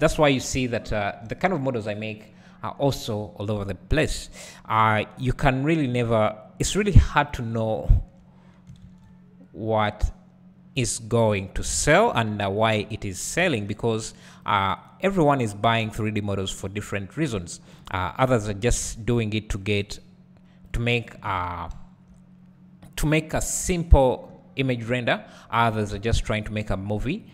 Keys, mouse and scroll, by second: 0.5 Tab, 2.6 scroll up 1, 2.9 `, 4.3-4.7 scroll down 1, 4.7-5.3 scroll up 1, 5.8-6.8 scroll down 1, 6.8 ctrl+r, 7.6 right click, 7.8 `, 8.9 alt+s, 10.9 click, 11.3 `, 12.5 click, 13.6 g, 14.5 click, 16.0 g, 16.9 `, 18.3 ctrl+click, 18.5 `, 19.9-26.6 drag, 21.4 alt+a, 21.8 `.